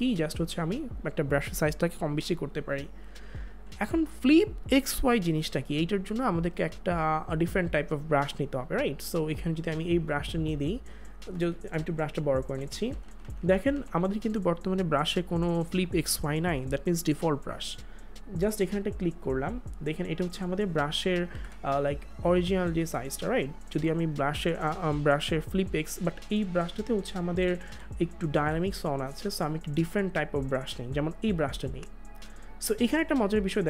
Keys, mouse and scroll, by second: 3.3 click, 3.4 ctrl+z, 6.7 click, 11.7 ], 21.3 ctrl+z, 25.6 ctrl+z, 27.4 click, 29.1 click.